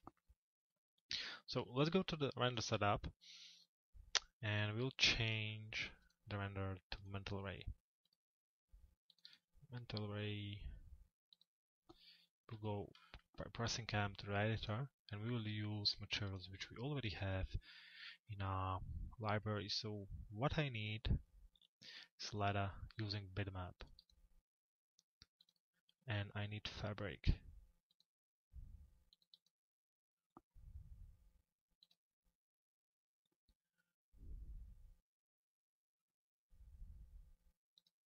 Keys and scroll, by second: 12.1 m.